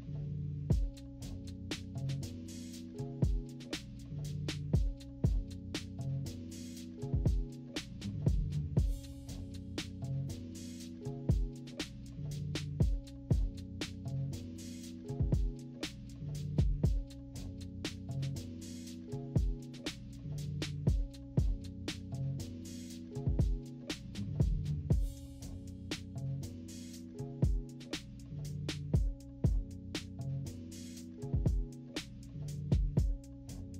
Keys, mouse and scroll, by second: 0.0 click, 1.1 click, 1.3 click, 1.6 click, 2.4 click, 4.0 click, 4.2 -, 4.4 click, 4.5 =, 4.6-5.1 scroll up 4, 4.7 =, 5.0 click, 5.1-6.2 drag, 6.3 click, 6.5 click, 8.9 click, 10.1 click, 11.9 -, 12.0 =, 12.4 click, 12.5 click, 13.4 click, 13.7 click, 14.0 click, 14.3 click, 14.7 click, 15.6 click, 17.7 -, 17.9 =, 18.1 click, 20.3 click, 21.8 -, 21.9 middle click, 22.0 =, 22.1 scroll down 2, 22.3 click, 25.6 click, 26.1 click, 29.3 click, 30.5 click, 32.3-33.6 typing, 32.4 scroll up 1, 32.6 scroll down 1, 32.7 scroll up 2, 33.3 click, 33.5 scroll down 2.